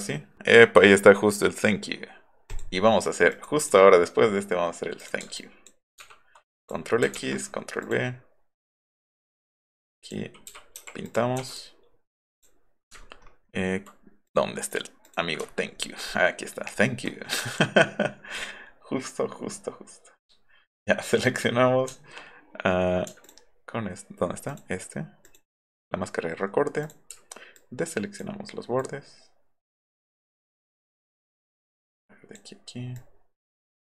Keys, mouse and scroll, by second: 2.5 click, 3.3 click, 3.6 click, 5.0 click, 5.4 ctrl+click, 6.6 click, 7.2 ctrl+v, 7.8 click, 8.9 click, 9.6-10.1 drag, 10.7 u, 11.1 click, 11.5 click, 12.4 click, 13.0-13.6 alt+scroll down 4, 14.3 click, 14.6 click, 15.1 click, 15.5-15.8 alt+scroll up 4, 16.4 alt+middle click, 21.0 click, 23.2 ctrl+click, 24.5 ctrl+click, 25.2 ctrl+click, 26.8 click, 27.6 alt+click, 28.8-29.8 alt+drag, 30.5 alt+click, 31.3-32.3 alt+drag, 32.9-33.9 alt+drag.